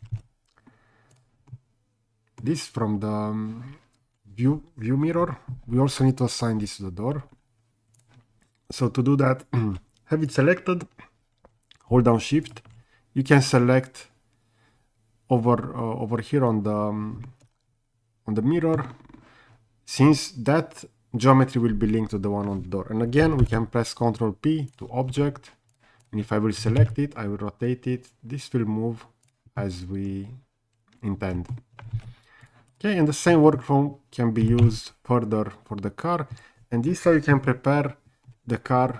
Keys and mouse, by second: 0.2 ctrl+z, 1.5-2.4 middle drag, 10.3 click, 17.3-18.8 middle drag, 23.4 ctrl+p, 26.6 r, 26.8 z, 29.6-31.5 middle drag, 32.0 ctrl+z, 32.7 click, 33.3 middle drag, 34.4 r, 34.6 z, 36.3 Escape, 38.2-38.9 middle drag.